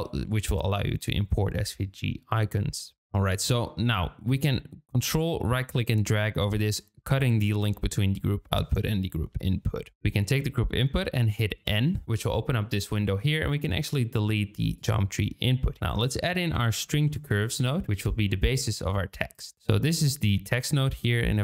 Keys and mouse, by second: 5.2-6.7 ctrl+drag, 9.9 click, 11.6 n, 13.1 click, 14.7 click, 15.7 shift+a, 17.8 Down, 20.2 click.